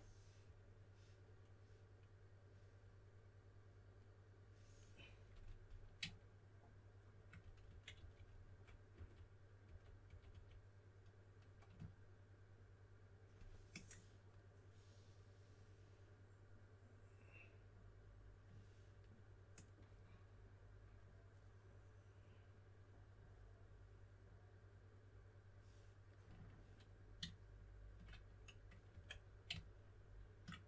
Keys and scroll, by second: 7.4-10.3 typing, 28.9 5.